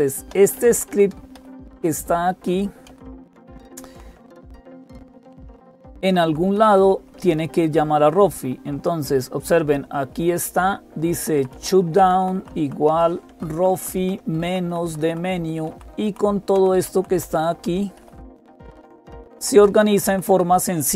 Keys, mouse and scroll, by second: 0.0-20.9 typing, 0.1 Down, 0.3 Down, 0.5 Down, 0.7 Down, 1.1 Up, 1.3 Up, 1.5 Up, 1.7 Up, 1.9 Up, 2.2 Up, 2.7 Down, 2.9 Down, 3.1 Down, 3.3 Down, 4.6 Down, 6.8 Up, 9.7 Up, 11.2 Up, 11.8 Left, 12.0 Left, 12.2 Left, 14.2 Right, 15.5 Right, 15.8 Right, 16.4 Right, 16.6 Down, 17.8 Down, 18.0-18.4 Down, 18.4 Up, 19.2 Up, 19.4-19.7 Up, 19.7 Down.